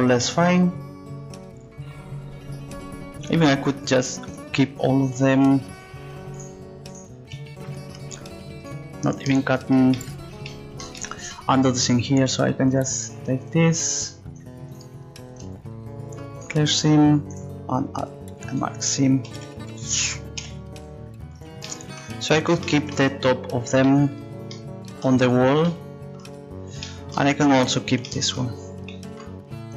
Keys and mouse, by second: 9.5 click, 12.7-16.5 right drag, 16.5 click, 19.3-20.4 drag, 19.3 a, 19.4 a, 20.4 u.